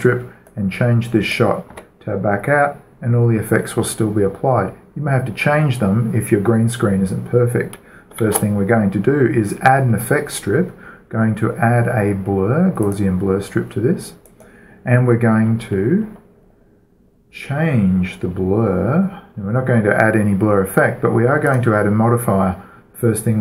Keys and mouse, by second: 0.9-3.5 drag, 2.1 Tab, 8.7 shift+a, 13.3-15.1 drag, 14.7-16.3 right drag, 16.2-21.8 middle drag, 21.8-23.4 drag.